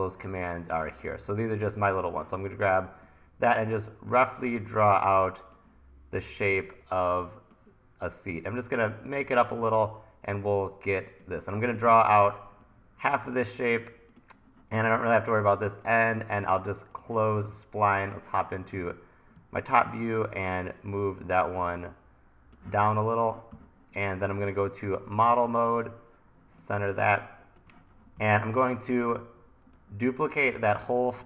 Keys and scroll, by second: 9.5 super+z, 12.0 super+z, 19.4 1, 23.5 v, 27.1 1, 28.2 e.